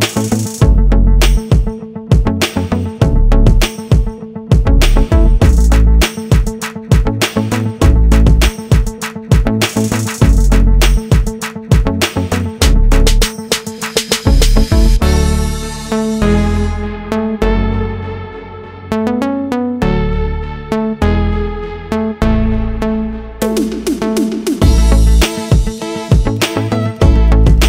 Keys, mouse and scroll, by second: 4.4 click, 4.8 double click, 5.5 ctrl+click, 6.6 ctrl+r, 7.3 click, 9.6 ctrl+r, 10.1 click, 11.2 ctrl+click, 12.7 click, 14.6 click, 17.4 ctrl+z, 18.7 click, 20.6 click, 20.8 double click, 22.8 click, 23.0 double click, 23.9 click, 25.0 click, 27.2 click.